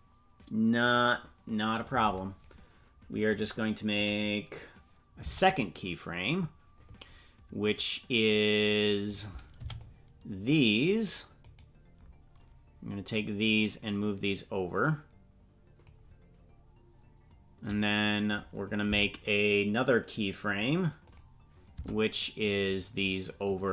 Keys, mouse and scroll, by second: 3.3 click, 3.9 click, 5.2 Tab, 9.5 right click, 9.5 c, 13.1-15.8 drag, 18.9 Tab, 21.0 click, 21.7 Tab, 23.4-23.7 drag.